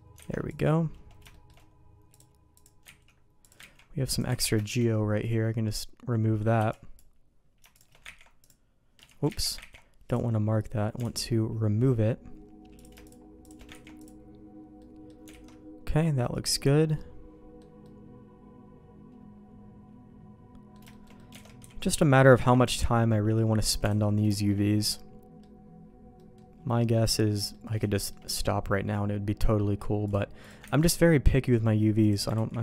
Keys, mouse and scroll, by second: 0.2 alt+a, 0.4 click, 1.3 shift+middle click, 2.1 click, 2.5 click, 3.0 ctrl+x, 3.4 click, 3.6 ctrl+x, 4.1 click, 4.4 ctrl+x, 4.6 middle click, 6.5 b, 7.7 click, 8.1 ctrl+e, 8.9 Escape, 9.2 ctrl+z, 9.8 ctrl+e, 11.0 alt+a, 12.7 click, 13.0 shift+click, 13.8 ctrl+e, 14.7 middle click, 15.4 alt+a, 16.9 middle click, 17.8-20.7 middle drag, 20.8 shift+middle click, 21.1 middle click, 21.4 alt+a, 21.6 b, 22.5 ctrl+e, 23.0 middle click, 23.8 alt+a, 23.9 middle click, 24.3 shift+middle click, 24.9 middle click, 26.1 middle click, 26.7 middle click, 27.1 shift+middle click, 27.5 middle click, 27.9 shift+middle click, 28.3-29.5 middle drag, 30.0 click, 30.6 ctrl+x, 30.9 middle click, 32.0 click, 32.3 ctrl+e.